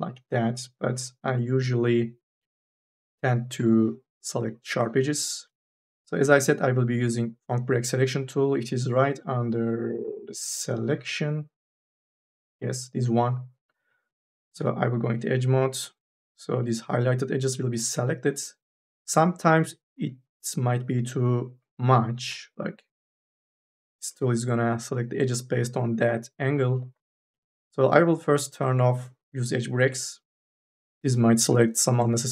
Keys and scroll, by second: 3.6 2, 6.8 u, 7.3 n, 8.1 3, 14.4 2.